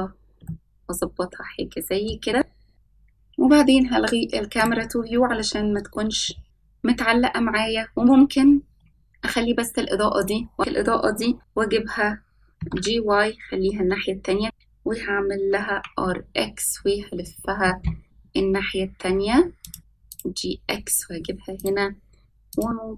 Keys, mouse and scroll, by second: 1.0-2.7 shift+middle drag, 5.5 click, 7.5 scroll down 1, 8.9-9.5 shift+middle drag, 11.1 click, 13.7 click, 13.7 s, 13.8 g, 15.3 scroll down 1, 17.0 r, 19.8 g.